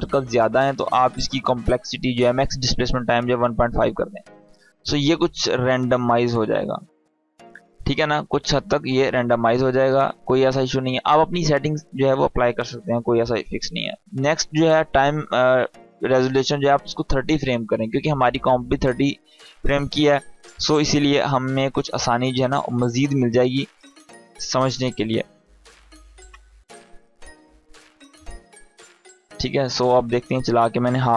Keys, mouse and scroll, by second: 5.4-6.3 drag, 13.9 click, 17.9-20.3 drag.